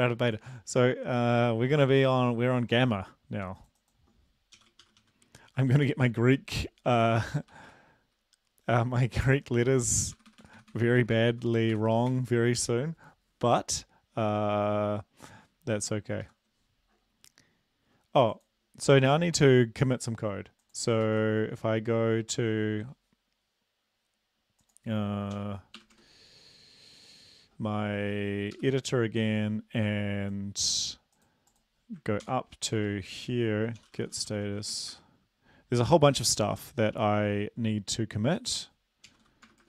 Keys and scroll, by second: 4.5-5.3 typing, 5.9 ctrl+s, 10.2 Delete, 10.3 Delete, 10.4 Delete, 10.6 Delete, 10.7 Delete, 11.1 Delete, 11.1 Delete, 11.3 Delete, 11.7 Delete, 12.1 ctrl+s, 16.5 super+Left, 21.1 ctrl+`, 25.4-26.0 typing, 28.7 super+Up, 32.3 ctrl+l, 32.8 Up, 33.2 Down, 33.8-35.2 typing, 39.1-39.6 typing.